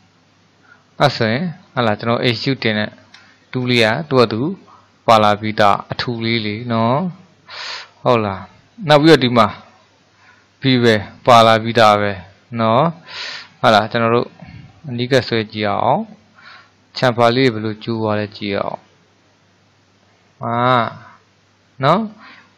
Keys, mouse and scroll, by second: 0.0-1.1 middle drag, 1.1-1.5 scroll up 3, 1.5-2.9 shift+middle drag, 2.9-3.3 scroll down 2, 3.3-6.8 shift+middle drag, 7.4-10.4 middle drag, 14.0-15.0 scroll up 3, 15.0-15.7 scroll up 1, 15.7-18.2 scroll up 1, 18.8-21.9 drag.